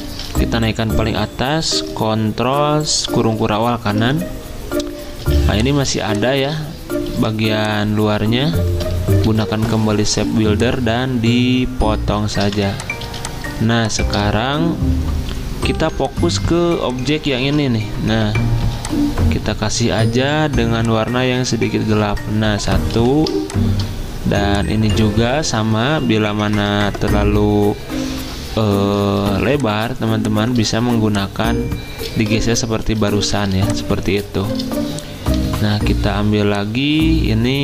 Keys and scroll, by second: 0.0 ctrl+z, 3.4 ctrl+shift+], 5.3 z, 7.1 v, 9.3 m, 12.4 v, 13.0 z, 15.8 v, 17.4 ctrl+z, 18.6 i, 22.9 v, 26.2 Up, 26.4 Up, 26.4 Up, 26.7 Up, 26.8 Up, 29.3 z, 32.4 ctrl+z, 32.5 ctrl+z, 32.7 ctrl+z, 35.4 i.